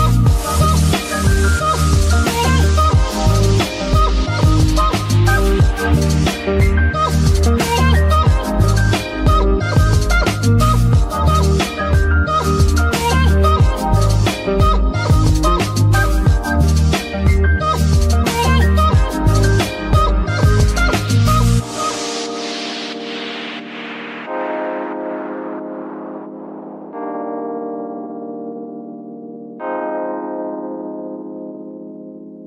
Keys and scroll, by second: 7.1 z, 8.2 Tab, 8.8 Tab, 14.9 ctrl+Tab, 25.9 shift+z, 29.6 z.